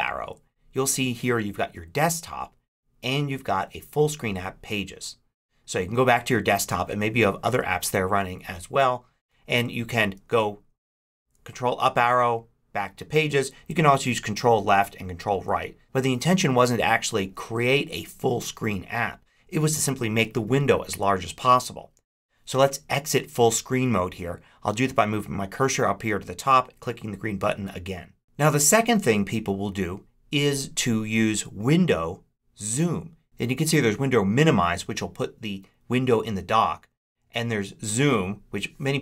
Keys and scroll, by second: 10.8 ctrl+Up, 14.4 ctrl+Left, 15.1 ctrl+Right.